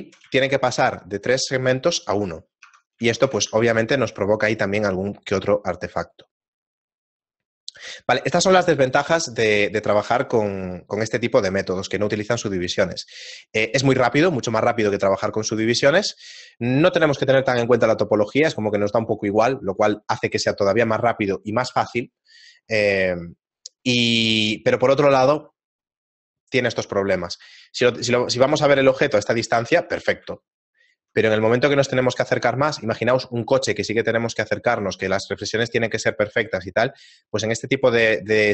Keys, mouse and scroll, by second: 2.3 shift+middle click, 3.9 Tab, 3.9 shift+middle click, 3.9 z, 7.7 scroll down 2, 8.4 shift+middle click, 8.4-10.6 scroll down 3, 12.7 shift+middle click, 28.0 scroll down 2, 28.9 shift+middle click, 28.9 scroll down 2, 30.4 shift+middle click, 31.4-32.4 scroll up 4, 32.4 shift+middle click, 34.2 shift+middle click, 36.8 shift+middle click.